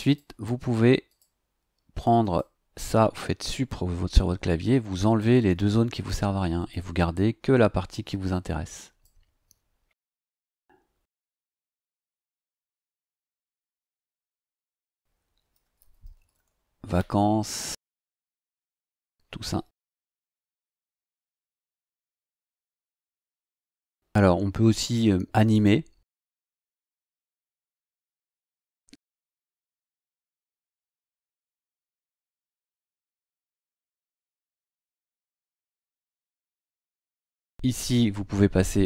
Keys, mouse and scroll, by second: 0.0 click, 1.1 click, 2.2 click, 4.1 Delete, 5.0 click, 5.5 Delete, 6.6 click, 7.1-9.2 drag, 13.3 click, 15.4-16.5 typing, 18.1 click, 19.7-20.9 typing, 25.5 click, 27.8 click, 29.3 click, 30.3 click, 33.5 click, 34.9 click.